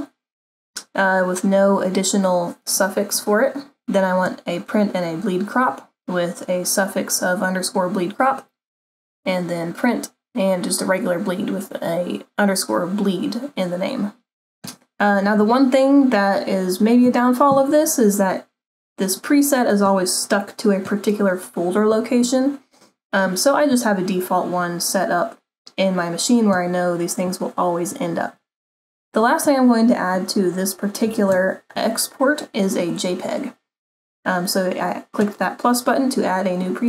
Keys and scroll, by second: 31.3 super+-.